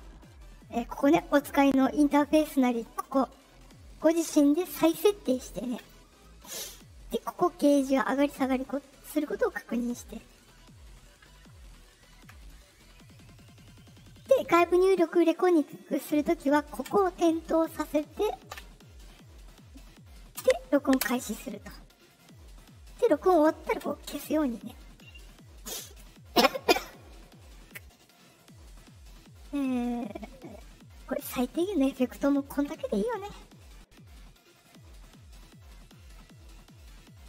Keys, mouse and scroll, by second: 2.9 click, 5.7 click, 16.8 click, 20.3 space, 21.0 space, 23.7 click, 31.2 click, 34.0 ;, 37.1 Right.